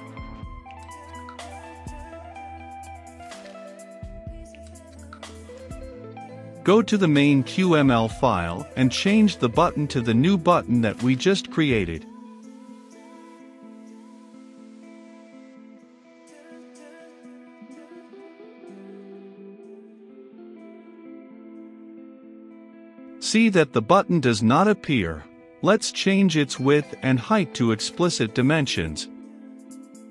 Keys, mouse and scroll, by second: 0.5 click, 0.9 middle click, 1.6-3.7 drag, 4.2-14.3 drag, 14.3-15.7 typing, 16.2 Return, 16.8 shift+], 17.2 Return, 18.4-23.8 drag, 23.8 middle click, 24.5-29.3 drag.